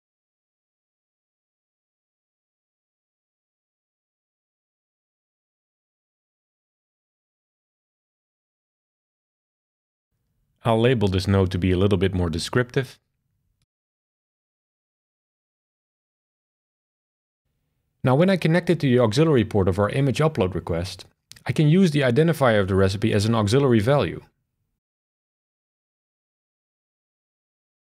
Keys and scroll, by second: 0.6 super+c, 2.9 super+v, 12.4 shift+super+Left, 12.6-14.7 typing.